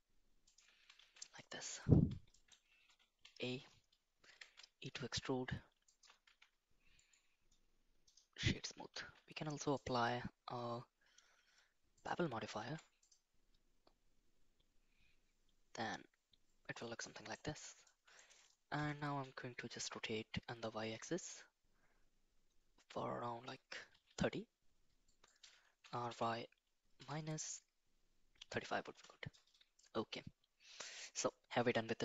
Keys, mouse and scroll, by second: 1.0 shift+z, 1.4 middle click, 2.3 middle click, 3.2 a, 4.2 e, 6.2 Tab, 7.0 right click, 9.7-12.0 drag, 12.5 ctrl+a, 17.0 middle click, 17.8 middle click, 18.7 r, 25.8 r, 29.7-30.9 middle drag.